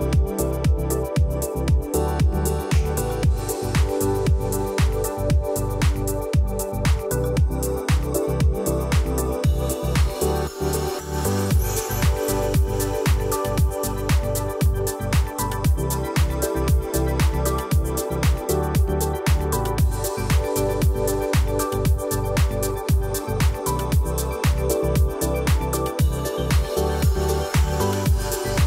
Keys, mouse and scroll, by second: 0.6-1.5 alt+scroll down 1, 1.5-1.9 alt+scroll up 2, 2.1-2.5 drag, 10.1 alt+scroll down 1, 11.1-11.5 alt+scroll up 1, 12.3-12.9 drag, 13.9 alt+scroll down 1, 14.3 click, 14.5-14.9 alt+scroll down 1, 14.9-15.3 alt+scroll up 1, 16.6 click, 19.4-20.3 scroll up 1, 20.3 click, 21.6 alt+scroll down 1, 22.1-22.5 alt+scroll up 1, 23.6-24.4 drag, 25.6-26.1 scroll up 1, 26.1-27.8 drag, 28.4-28.6 alt+scroll up 1.